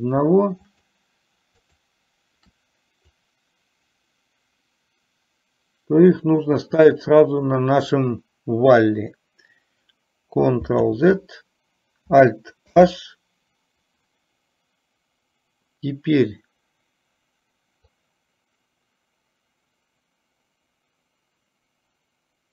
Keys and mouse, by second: 0.9 shift+click, 1.7 shift+click, 3.4-6.2 drag, 11.0 ctrl+z, 12.9 alt+h, 18.1-22.5 drag.